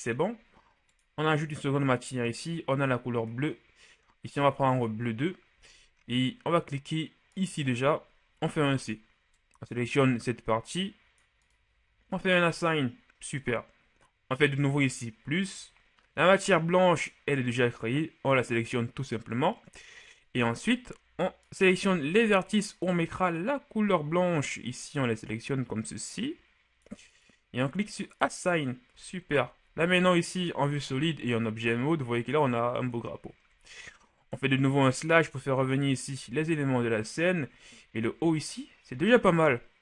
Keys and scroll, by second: 8.6 c, 21.8 c, 29.0 Tab, 29.8 shift+z, 30.8 shift+z, 34.3 KP_Divide, 36.2 a.